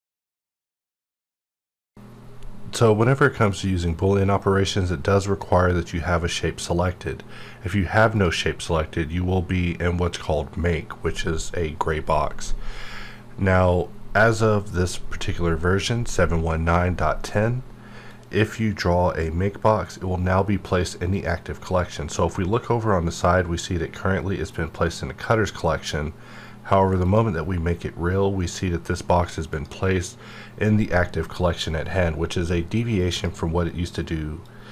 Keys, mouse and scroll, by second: 18.1-21.5 drag, 27.0 click, 29.5 click, 33.0-34.7 drag.